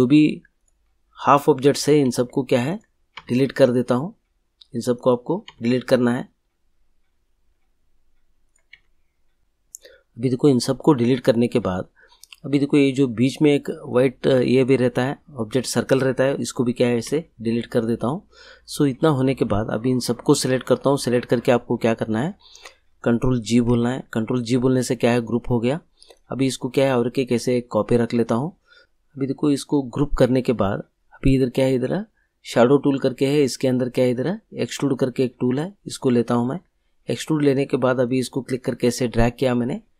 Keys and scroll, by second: 2.0 Delete, 5.4 Delete, 8.7 Delete, 17.0 Delete, 23.6 ctrl+g.